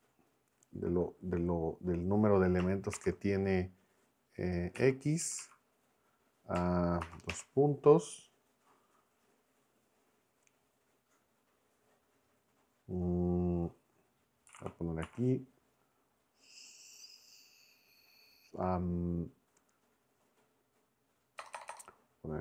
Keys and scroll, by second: 2.9 shift+9, 4.7 x, 5.2 Right, 7.1 shift+;, 7.3 Return, 14.5 s, 15.0 m, 21.4-22.4 typing.